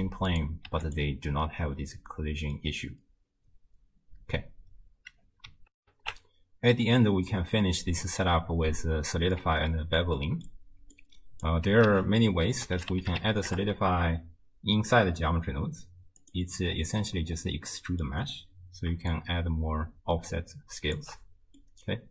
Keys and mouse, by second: 0.3 click, 1.8 middle drag, 2.1 click, 5.8 ctrl+alt+shift+w, 6.1 ctrl+alt+shift+q, 8.3-9.4 drag, 9.8 ctrl+middle click, 10.2 middle click, 11.0 click, 11.9 ctrl+a, 17.8 middle click, 19.1-21.0 shift+drag, 21.6-22.1 middle drag.